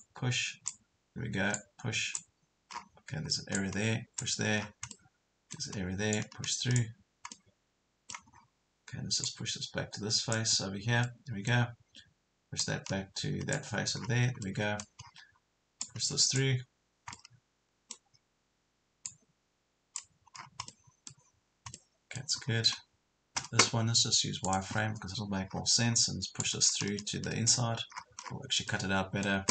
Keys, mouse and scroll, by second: 2.7 scroll down 1, 3.2-3.6 scroll up 1, 3.6 click, 4.6 scroll down 1, 4.9 middle click, 5.8 scroll up 1, 6.2 click, 7.4 middle click, 8.3 scroll up 1, 9.2-11.0 drag, 11.0 middle click, 12.6-14.0 drag, 14.0 scroll down 1, 14.4 middle click, 15.0 scroll up 1, 15.8-17.0 drag, 17.2 middle click, 19.0 click, 20.4 scroll down 1, 20.7 middle click, 21.4 scroll down 1, 21.8 middle click, 22.4-23.0 scroll up 2, 24.4 click, 25.6 scroll up 1, 26.4 click, 27.9 scroll down 1, 28.7 middle click.